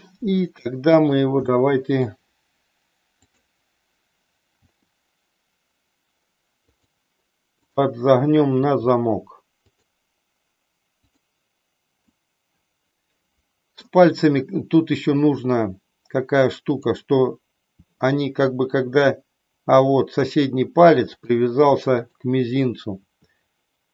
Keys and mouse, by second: 0.3 middle click, 1.5 middle click, 4.5 r, 6.8 click, 8.7 r, 9.8 click, 12.1-13.9 middle drag, 16.7 click, 17.5 r, 21.2 click, 21.9 click, 22.9 r.